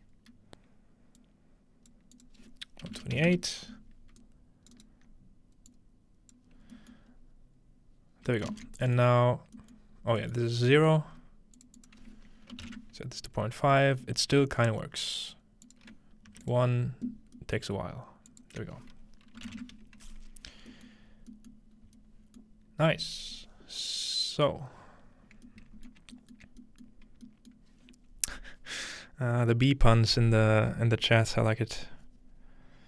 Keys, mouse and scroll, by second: 1.4 click, 2.2 click, 4.3 alt+right click, 5.7 click, 6.6-8.0 alt+drag, 6.6-7.0 scroll down 1, 7.1 scroll up 1, 8.1 scroll down 1, 8.7 typing, 8.7 ctrl+middle click, 9.0 middle click, 9.2-10.4 scroll down 2, 9.9 middle click, 10.4 middle click, 10.4 scroll up 2, 11.1 scroll up 1, 11.6 click, 11.9-12.6 scroll up 1, 12.6-13.1 scroll up 1, 14.4-15.7 scroll up 2, 15.0 middle click, 15.7 click, 16.3 1, 16.5 click, 17.4 middle click, 18.3 click, 20.3-20.6 scroll down 2, 20.9-22.1 middle drag, 21.1 scroll down 2, 21.8-22.1 scroll up 2, 22.5-25.5 middle drag, 26.0 shift+middle click, 28.0-30.5 middle drag.